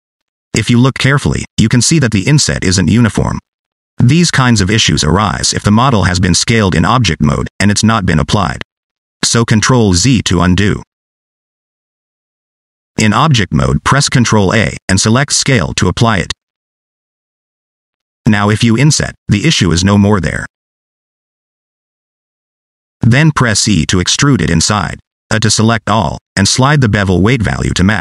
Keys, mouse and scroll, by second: 0.2 scroll down 1, 0.2 middle click, 0.8 middle click, 1.6 click, 2.0 scroll up 2, 2.1 shift+middle click, 2.7 shift+middle click, 4.0-6.1 typing, 4.1 click, 4.5 click, 5.0 click, 5.4 click, 5.8 click, 5.9 click, 6.8 ctrl+z, 7.1 ctrl+z, 7.4 ctrl+z, 8.1 ctrl+z, 8.4 ctrl+z, 8.9 ctrl+z, 9.2 ctrl+z, 13.5 Tab, 14.7 ctrl+a, 17.6 Tab, 21.7 middle click, 22.1 scroll down 2, 22.3 shift+middle click, 22.6 middle click, 23.0 shift+middle click, 23.6 middle click, 24.6 e, 25.0 a, 26.8 click.